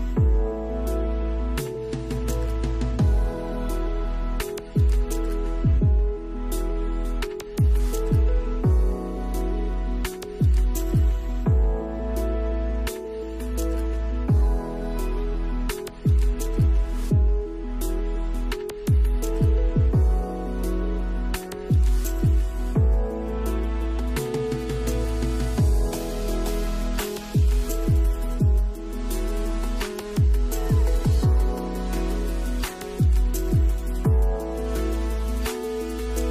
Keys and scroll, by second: 5.5 space, 7.5 space, 24.1 space, 26.8 space.